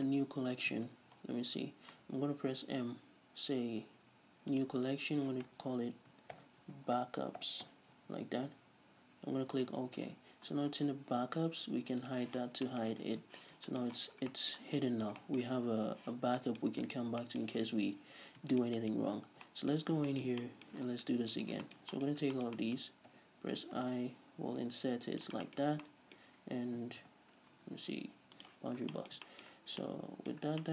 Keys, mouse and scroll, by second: 0.7-2.5 scroll up 1, 2.5 m, 10.5-12.0 scroll down 2, 12.0 click, 12.7-14.0 middle drag, 14.0 right click, 14.2-21.4 middle drag, 14.9 scroll up 2, 16.2 scroll down 2, 17.8-18.2 scroll up 2, 18.2-18.5 scroll down 2, 19.0 scroll up 2, 19.3 Tab, 19.9 scroll up 2, 21.4 ctrl+shift+right click, 21.6-25.2 middle drag, 22.1 scroll up 2, 25.2 shift+click, 25.4-30.7 middle drag, 25.6 scroll up 2, 27.0 ., 28.7 scroll up 2.